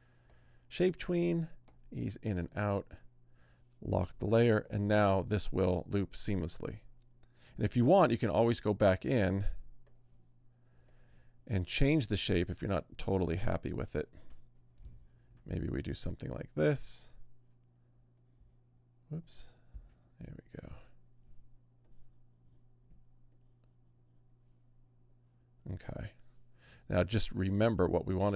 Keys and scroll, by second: 4.6 Return, 8.4 Return.